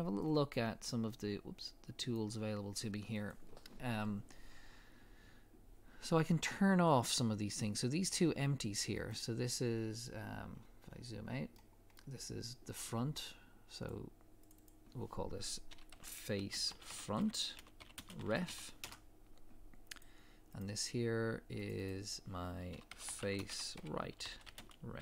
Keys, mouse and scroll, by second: 0.5 click, 10.4 scroll down 1, 11.5 middle click, 13.9 click, 18.9 Return, 20.0 click.